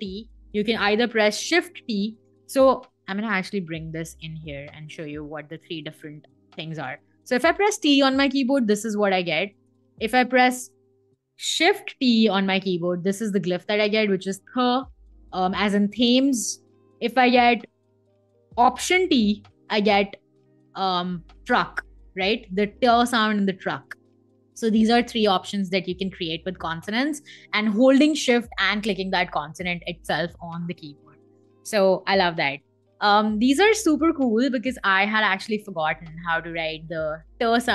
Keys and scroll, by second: 0.3 BackSpace, 0.8 shift+t, 1.9 BackSpace, 2.5 Escape, 6.4 t, 7.0 Escape, 7.8 Escape, 11.4 shift+t, 11.8 Escape, 18.5 alt+t, 18.9 Escape.